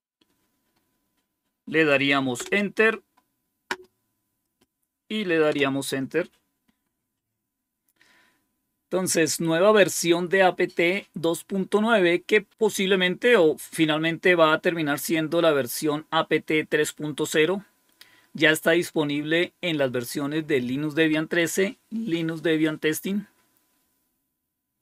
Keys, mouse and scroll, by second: 0.6-1.6 scroll down 2, 4.3-5.4 drag, 5.4 Return.